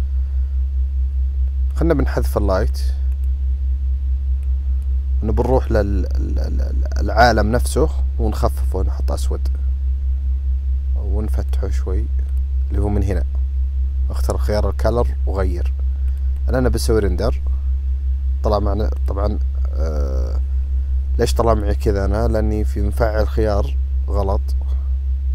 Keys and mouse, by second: 0.0 click, 2.8 click, 3.2 click, 4.5 click, 7.7 click, 16.1-16.8 drag, 21.6 drag.